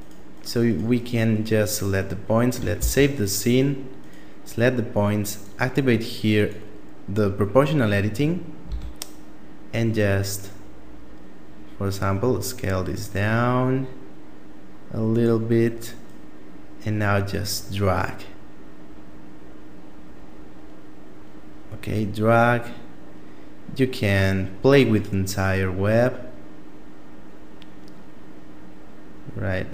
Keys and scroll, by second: 2.1 ctrl+s, 8.0 s.